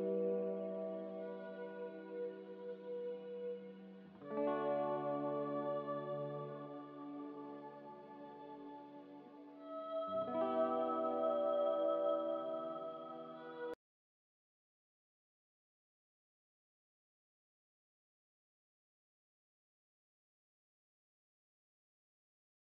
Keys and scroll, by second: 4.1 a, 9.4 m, 10.8 a, 20.2 F9.